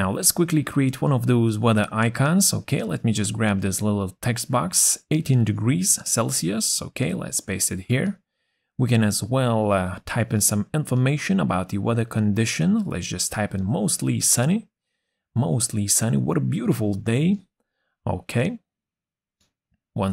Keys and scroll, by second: 6.0 ctrl+c, 14.1 shift+\, 15.6 shift+m.